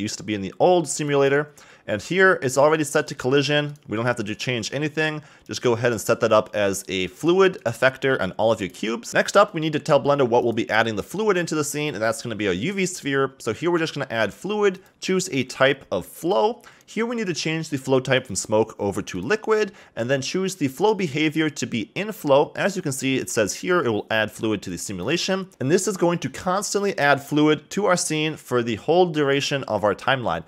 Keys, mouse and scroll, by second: 5.4 click, 5.9 click, 7.0 click, 7.6-9.1 drag, 9.1-10.4 middle drag, 10.4 click, 13.8 click, 14.7-23.8 drag, 25.5 click, 28.9-29.8 scroll down 1.